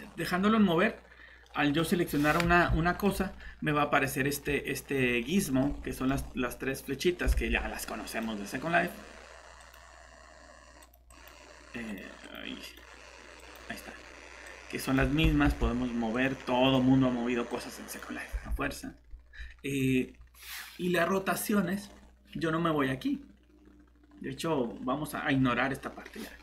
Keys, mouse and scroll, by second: 1.4 middle click, 1.8 typing, 2.1 click, 2.9 middle click, 5.6-6.2 scroll up 2, 5.9 middle click, 7.0 middle click, 7.3 alt+shift+Tab, 8.1 click, 13.9 scroll up 1, 14.4 click, 15.4 ctrl+z, 18.5 alt+Tab, 21.3 middle click, 21.9 scroll down 1.